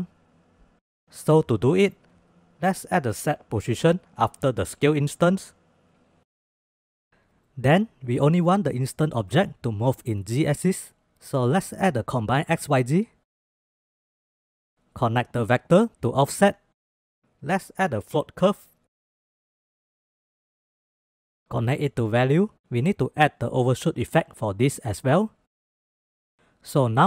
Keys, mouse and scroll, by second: 1.5-1.9 middle drag, 2.1 middle click, 2.7 shift+a, 6.3 drag, 6.6-7.0 drag, 7.4 shift+click, 11.6 shift+a, 14.8-16.4 drag, 17.1 click, 17.6 click, 17.8 click, 18.3 shift+a, 20.7-22.3 drag, 22.5 click, 22.7-24.3 drag, 24.8 click, 25.1 shift+click, 26.2 click.